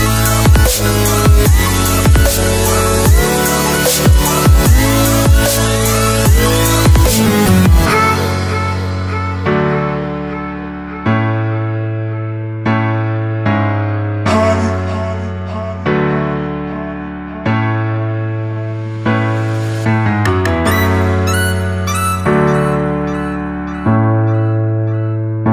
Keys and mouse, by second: 1.7 click, 3.0 click, 3.7 click, 4.4 click, 4.7 shift+a, 10.8 click, 13.8-16.4 drag, 19.1-19.7 shift+middle drag, 20.2 click, 21.4-21.9 shift+middle drag, 21.9 shift+click, 22.6 click.